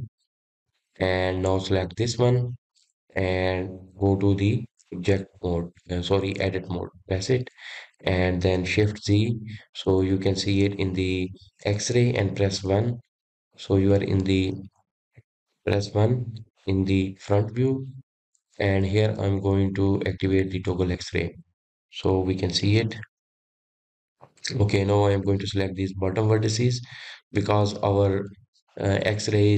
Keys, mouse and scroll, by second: 1.5 click, 2.4 click, 2.8-5.7 scroll down 1, 7.4 Tab, 8.1-8.6 scroll up 3, 8.6-10.0 scroll down 2, 10.0 shift+z, 13.6 KP_1, 15.2-16.4 middle drag, 16.9 KP_1, 21.5-23.7 drag, 23.7 shift+middle click, 24.4-25.4 scroll up 5, 25.4 click, 26.1 click.